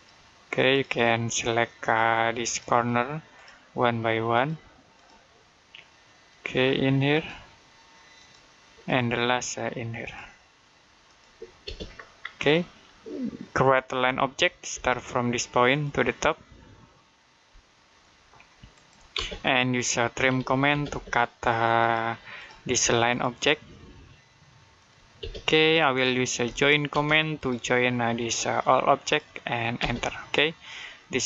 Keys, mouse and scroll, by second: 11.5 space, 11.8 scroll down 1, 12.3 middle click, 13.9 l, 14.6 space, 15.5 click, 18.6 click, 19.0-20.7 typing, 21.6 click, 25.0 space, 26.3 j, 26.7 space, 27.2 click, 29.6 space, 30.5 click.